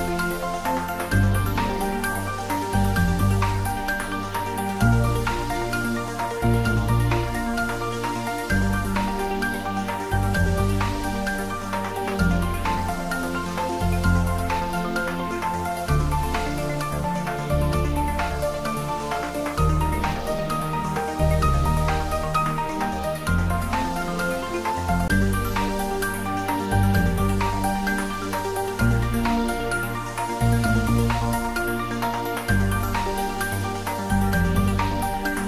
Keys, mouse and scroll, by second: 2.8 click, 2.9 click, 6.2 click, 14.0 scroll down 1, 18.5-19.4 scroll up 1, 28.2 click, 30.6 shift+click, 35.3-35.4 scroll up 1.